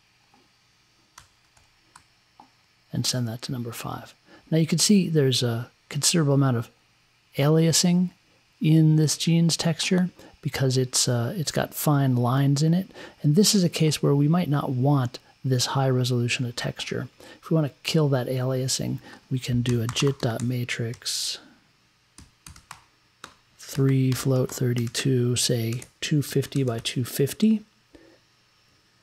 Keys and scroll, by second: 1.1 5, 19.4-27.2 typing.